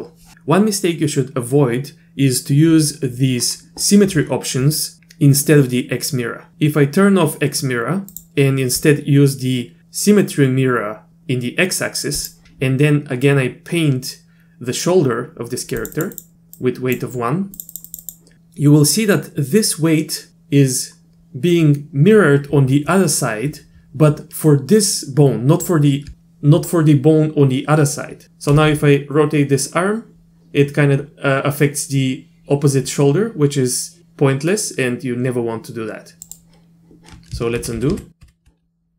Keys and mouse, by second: 8.1 click, 12.2 click, 15.8 click, 16.0 click, 16.2 click, 16.6 click, 17.6 click, 17.7 click, 17.9 click, 18.0 click, 28.6 r, 37.6 ctrl+z, 38.2 ctrl+z.